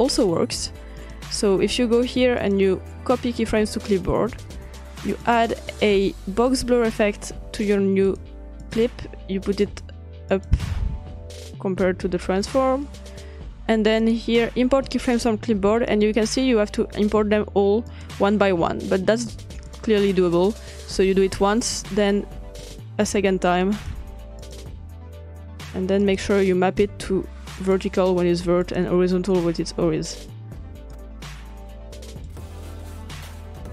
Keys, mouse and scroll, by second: 1.2-2.4 drag, 2.6-3.4 drag, 3.6-4.9 drag, 5.4-6.5 drag, 8.1 drag, 8.8-10.2 drag, 10.5-12.0 drag, 12.6-14.0 drag, 14.2-14.8 drag, 14.9-15.3 drag, 16.0 click, 17.9 click, 19.7-20.9 drag, 21.8 click, 22.6 click, 23.8 click, 24.4 click, 26.0 click, 27.6 click, 28.6 click, 30.8 click, 32.1 click.